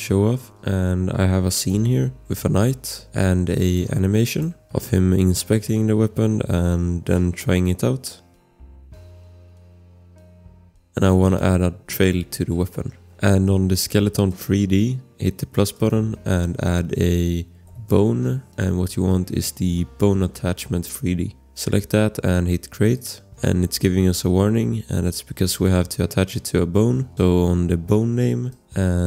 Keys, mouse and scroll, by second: 0.6 ctrl+c, 0.6 click, 3.6 click, 5.0 click, 8.6 click, 11.2 click, 12.7 click, 14.3 click, 15.7 click, 17.1-18.5 typing, 18.9-21.2 scroll, 21.2 click, 28.5 click, 28.8 scroll.